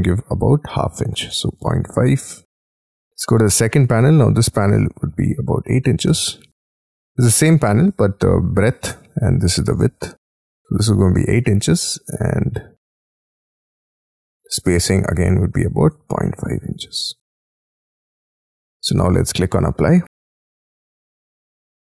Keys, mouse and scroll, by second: 1.3-2.8 typing, 5.3 8, 6.1 shift+', 15.6-16.2 typing, 16.7 Tab, 17.9 middle click.